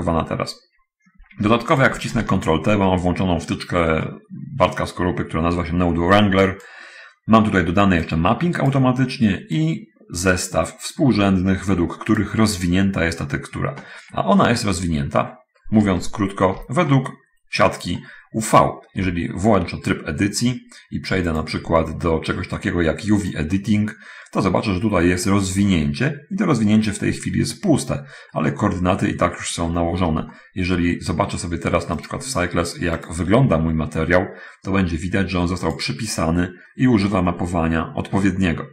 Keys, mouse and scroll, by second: 2.2 ctrl+click, 2.4 ctrl+t, 3.2 middle click, 4.4-5.6 middle drag, 6.4-7.2 drag, 8.5-9.0 drag, 10.0-12.8 drag, 14.8 middle click, 15.6-16.2 scroll up 1, 16.2 shift+scroll up 1, 16.4 shift+middle click, 17.3-18.8 shift+middle drag, 19.0 middle click, 19.4 Tab, 21.7 click, 23.7 click, 25.0 scroll up 1, 28.6-29.6 middle drag, 30.4 shift+scroll up 1, 30.7 shift+middle click, 31.6-32.4 scroll up 1, 32.4 click, 33.1 click, 36.1 click.